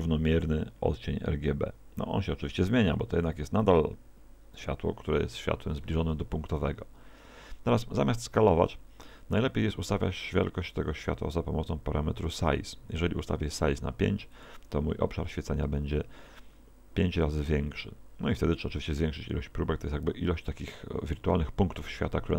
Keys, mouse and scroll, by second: 6.1 Escape, 8.6 alt+s, 13.6 click.